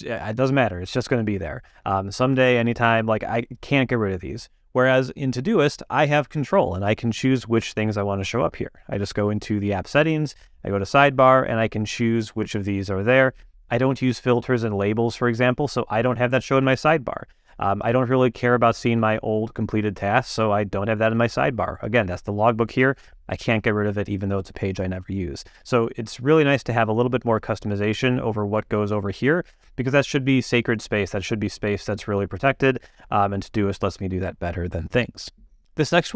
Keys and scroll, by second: 9.0 super+,.